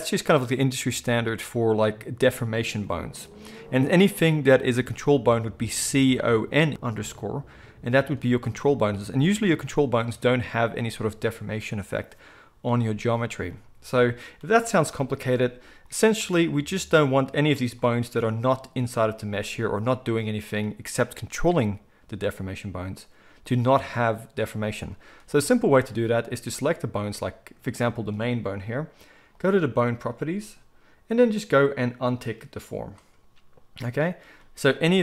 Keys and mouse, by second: 26.5 click, 26.6-29.3 middle drag, 29.3 click, 29.4-32.2 middle drag, 32.2 click, 32.3-35.0 middle drag.